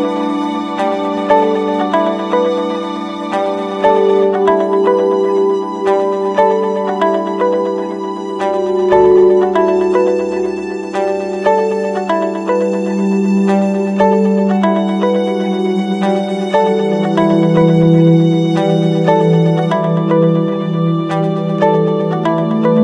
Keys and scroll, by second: 5.7 ctrl+-, 11.0 ctrl+0.